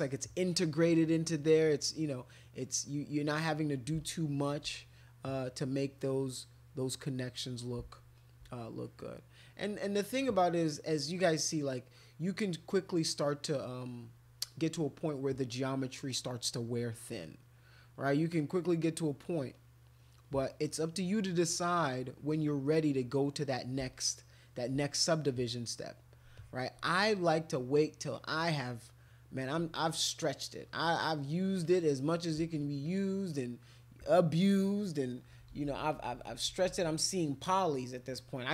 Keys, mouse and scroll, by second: 0.4 click, 1.1-3.9 drag, 4.0 shift+click, 4.5 shift+click, 4.8 click, 5.5 click, 5.9 click, 6.1 click, 6.3 click, 6.4 click, 7.0 click, 7.2 click, 7.3 click, 7.5 click, 7.7 click, 7.9 shift+click, 8.2 shift+click, 8.3 shift+click, 8.5 click, 10.0 click, 11.5 click, 11.9 click, 12.6 click, 13.0 click, 13.2 click, 13.4 click, 14.5 click, 15.3 click, 16.1 click, 16.9 click, 17.4 click, 18.2 click, 19.2 click, 19.5 click, 20.0 click, 20.2 click, 20.5 click, 20.7 click, 21.2 click, 22.2 click, 23.1 click, 23.9 shift+click, 24.2 shift+click, 24.4 shift+click, 24.7 shift+click, 25.2 click, 26.3 alt+click, 28.1 click, 30.2 alt+click, 31.0 alt+click, 31.6 alt+click, 32.8 click, 35.3-36.8 typing.